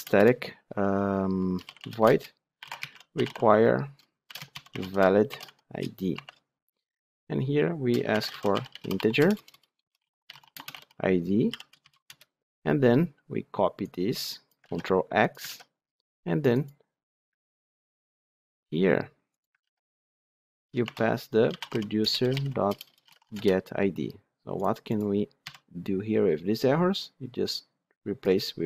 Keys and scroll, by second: 14.6 ctrl+x, 15.4 ctrl+v, 17.7 ctrl+c, 19.6 ctrl+v, 21.9 Return.